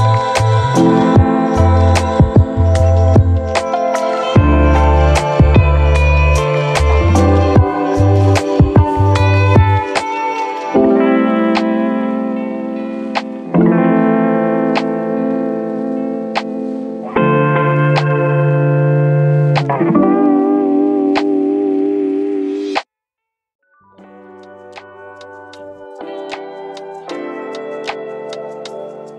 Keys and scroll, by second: 0.1 space.